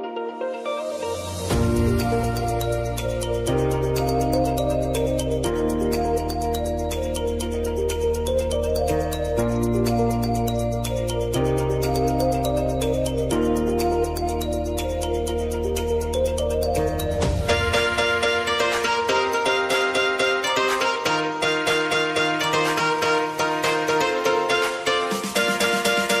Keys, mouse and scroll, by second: 1.1 alt+click, 2.1 t, 3.0 ctrl+a, 3.4 r, 4.3 Return, 6.0 [, 7.6 Right, 9.5 shift+=, 12.2-13.6 typing, 14.3 Return, 15.4 click, 16.8 ctrl+d.